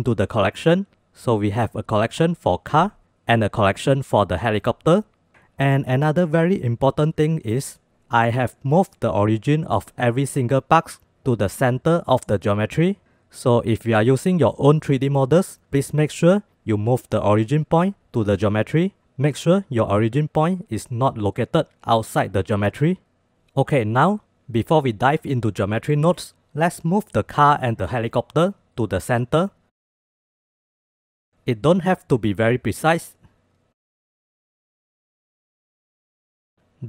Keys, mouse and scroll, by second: 1.8-3.0 drag, 3.0 F8, 3.2 F8, 7.1 click, 8.2-8.6 drag, 8.6 middle click, 8.6 scroll up 1, 9.1 shift+middle drag, 9.2 shift+click, 12.2 click, 15.0-18.0 drag, 23.8 KP_7, 26.7-28.6 drag, 29.1 shift+middle drag, 30.0-32.0 drag, 32.0 middle click, 32.3-34.5 drag, 34.5 middle click, 35.0-36.5 drag.